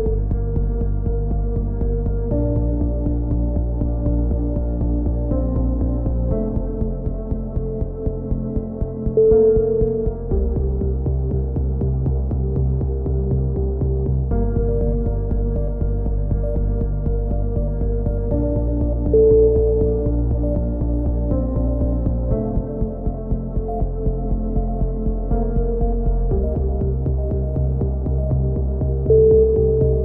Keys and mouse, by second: 0.1 c, 0.8-1.8 drag, 1.8 g, 4.2 c, 5.8 click, 6.1 middle click, 6.8 click, 7.1 g, 8.8 middle click, 9.1 a, 9.3 z, 9.6 middle click, 9.6 z, 10.8 click, 17.1 z, 17.5 a, 18.0 a, 18.2 click, 19.9-22.8 drag, 21.3 z, 22.2 KP_3, 22.9 c, 25.0-26.1 drag, 25.5 KP_7, 26.4 s, 29.2 c.